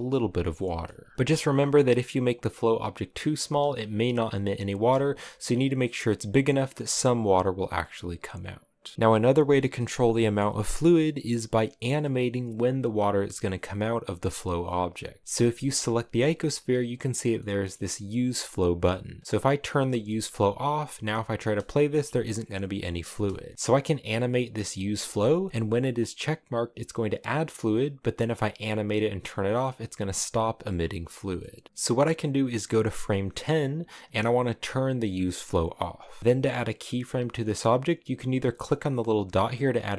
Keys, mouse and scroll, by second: 0.2 scroll down 1, 0.4 shift+middle click, 1.1 s, 3.4 space, 4.8 space, 5.5 s, 6.0 click, 6.7 space, 7.5-15.2 middle drag, 15.2 g, 17.2 middle click, 17.5-17.8 scroll up 2, 19.2 click, 20.1-21.4 drag, 21.4 space, 22.7 space, 23.6 click, 24.3 click, 27.0 click, 28.2 click, 31.1 middle click, 31.6-35.0 drag, 38.0 click, 38.8 click, 39.2 click.